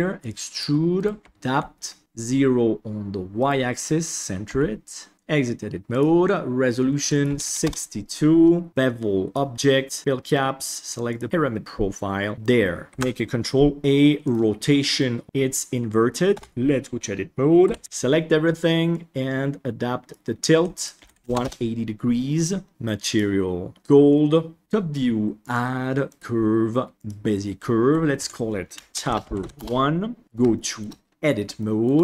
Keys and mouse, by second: 0.5 click, 0.9 click, 1.2 g, 2.0 a, 3.3 right click, 4.4 g, 5.1 Tab, 5.9 click, 7.0 click, 10.2 click, 12.3-12.9 middle drag, 12.9 ctrl+a, 15.1 middle click, 15.2 KP_1, 16.3 Tab, 17.6 a, 17.8 ctrl+z, 17.8 KP_1, 18.9-20.0 drag, 20.7 click, 22.7 Tab, 23.0 click, 24.6 KP_7, 25.4-27.0 drag, 28.1 F2, 30.2 Tab, 30.5 shift+middle click, 31.5 shift+middle click.